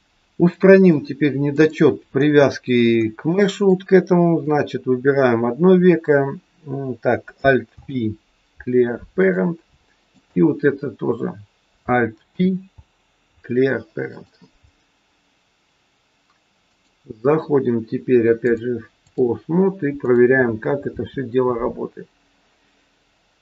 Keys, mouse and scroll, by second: 0.3 click, 2.1-3.0 scroll down 1, 3.0 scroll down 1, 3.3 shift+middle click, 4.4 click, 7.7 alt+p, 10.1 click, 12.3 alt+p, 15.1 scroll up 1, 16.6 click, 18.4 click, 20.8 r.